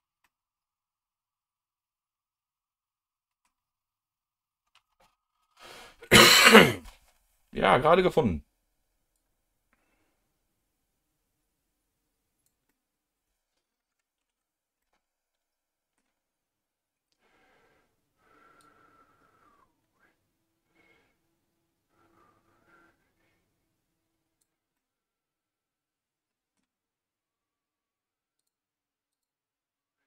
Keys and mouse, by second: 0.2-3.4 middle drag, 9.1-12.7 drag, 12.7-13.7 middle drag, 14.6 ctrl+z, 14.8-16.0 middle drag, 18.6-24.6 drag, 24.8-26.6 middle drag, 28.4 click, 29.1 click.